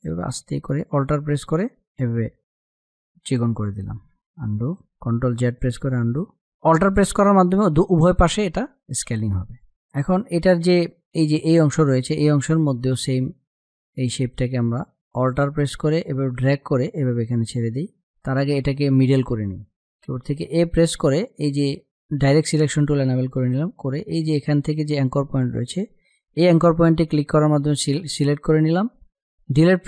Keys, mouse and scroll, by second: 0.0-4.0 alt+drag, 4.0 ctrl+z, 5.2 click, 6.1 click, 9.4 ctrl+-, 9.5 space, 9.6 click, 9.7 click, 10.0 space, 13.6 click, 15.8-20.9 alt+drag, 23.4 click, 29.4 Delete.